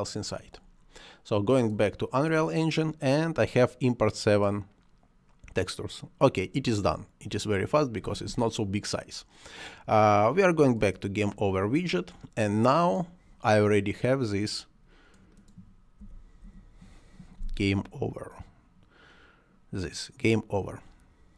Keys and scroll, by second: 16.0 c, 16.5 o.